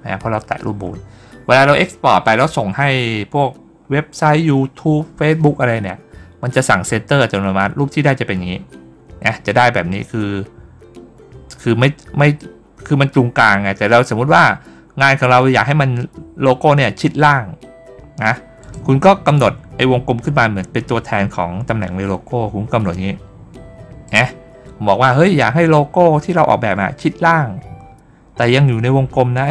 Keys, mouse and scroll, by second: 18.5 click, 19.2-23.9 drag.